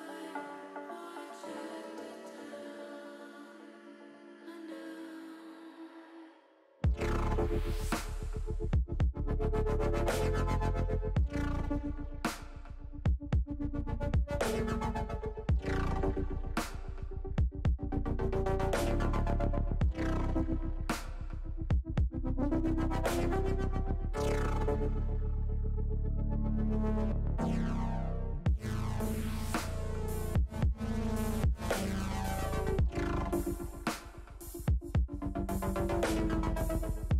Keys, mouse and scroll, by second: 1.8 click, 3.3 ctrl+z, 4.0 click, 5.9 shift+middle click, 7.1-8.3 drag, 9.8-11.4 drag, 12.8-13.8 middle drag, 14.3 shift+click, 14.9 shift+click, 16.0 middle click, 17.1 shift+click, 18.4 ctrl+z, 19.5 click, 21.0-22.9 middle drag, 23.9 click, 24.7 click, 28.6 Tab, 29.2 middle click, 32.4 Tab, 35.2 l.